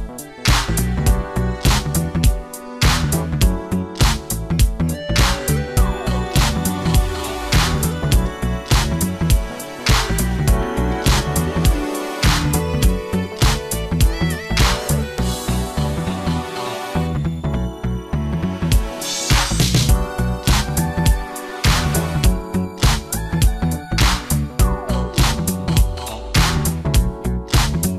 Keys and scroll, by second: 0.5 Return, 1.1 ctrl+KP_Add, 1.5 s, 9.1 ctrl+space, 10.1 Return, 12.4 s, 12.7 ctrl+space, 13.6 space, 14.5 ], 17.1 alt+space, 19.7 Return, 19.9 3, 22.0 8, 22.4 Return, 25.0 ].